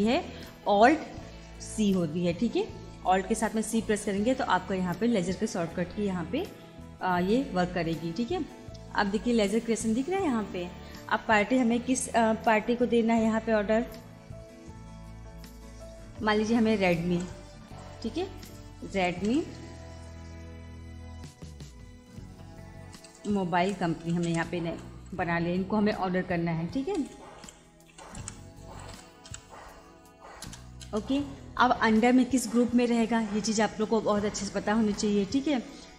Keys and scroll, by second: 7.0 alt+c, 17.1 shift+r, 18.2 e, 19.6 space, 23.0 shift+m, 23.3 o, 24.9 space, 27.0-28.9 typing, 30.4 Return.